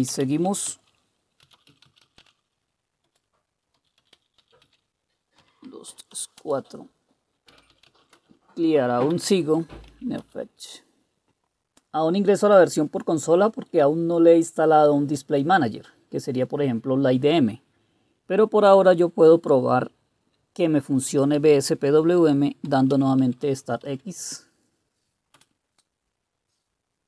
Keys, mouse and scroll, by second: 0.0-9.7 typing, 3.0 Return, 9.9 Tab, 10.2 Return, 22.7-24.3 typing, 25.3 Return.